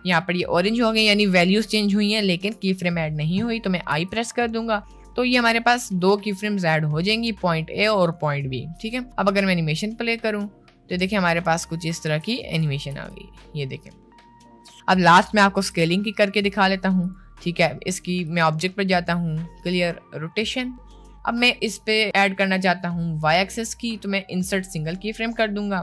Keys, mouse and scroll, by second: 3.9 i, 9.4 space, 12.2 space, 12.5 click, 12.9 space, 14.7 space, 15.7 a, 15.7 x, 18.4-19.9 drag, 22.9-24.9 right drag, 25.3 right click.